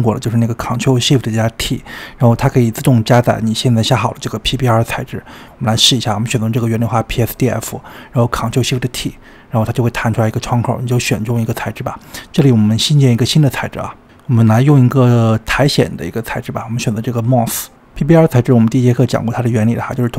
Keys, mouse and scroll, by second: 3.6-4.2 scroll down 4, 5.1 drag, 6.2 click, 7.2 ctrl+shift+click, 8.9 ctrl+shift+t.